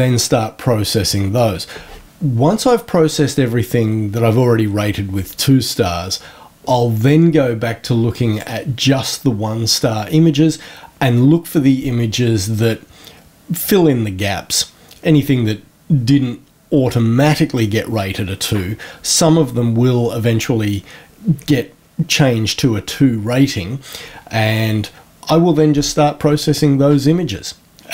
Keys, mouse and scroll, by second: 8.1 click.